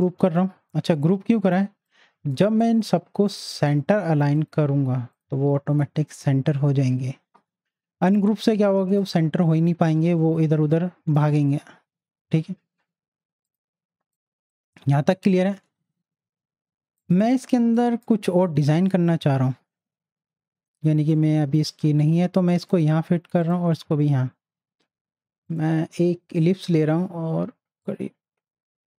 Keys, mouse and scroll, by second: 1.8-3.6 drag, 8.3 click, 8.3 z, 8.6-11.3 drag, 13.4 click, 14.0 space, 14.1 click, 14.4 space, 16.2 z, 17.0 click, 17.6 space, 17.8 click, 18.1 space, 18.7 click, 19.0 space, 21.1-23.4 drag, 25.5 right click, 26.4-28.9 drag.